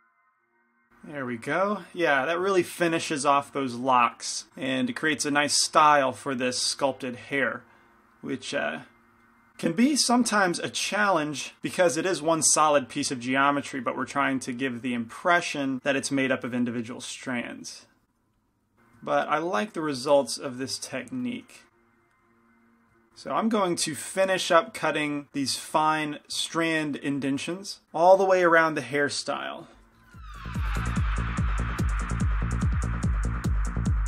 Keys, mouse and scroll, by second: 0.3-4.5 middle drag, 4.8-9.5 middle drag, 9.8-11.6 middle drag, 11.9 middle click, 12.7 f, 13.2 middle click, 14.1 f, 15.1 f, 16.1-18.8 drag, 18.7 shift+c, 20.9 p, 21.3 f, 21.8 click, 23.0-25.3 middle drag, 25.5-27.8 middle drag, 28.2-30.2 middle drag, 31.3-33.2 middle drag, 31.9 shift+c, 32.1 shift+f, 32.9 click.